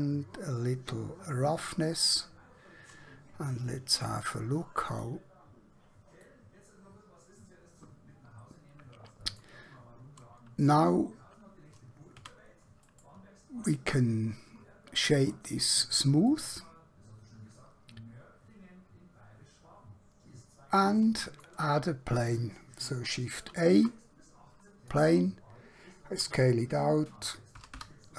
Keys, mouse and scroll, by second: 5.0 click, 6.3-9.5 middle drag, 12.2 a, 12.8 right click, 15.0 click, 16.3-19.4 middle drag, 23.4 shift+a, 25.0 click, 26.4 s, 27.6-28.1 typing.